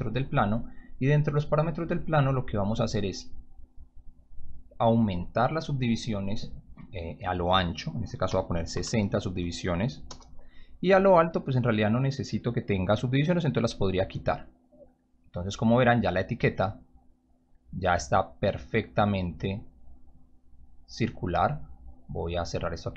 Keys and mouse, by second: 4.5 click, 8.3 6, 8.7 0, 10.0 Return, 13.6 right click, 22.0 click.